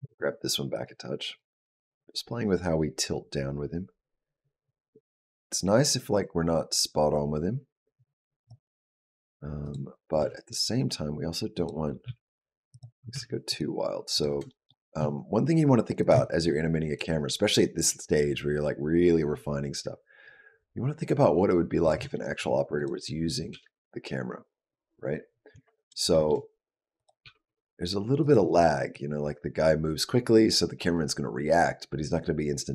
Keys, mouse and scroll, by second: 1.2 click, 8.9 click, 9.4 click, 10.0 r, 11.9 g, 12.9 r, 13.9 click, 14.3 shift+middle click, 14.8 s, 16.8 click, 21.9 shift+middle click, 22.6 click, 23.3 g, 25.9 shift+middle click, 26.8 click, 27.0 g, 28.7 click.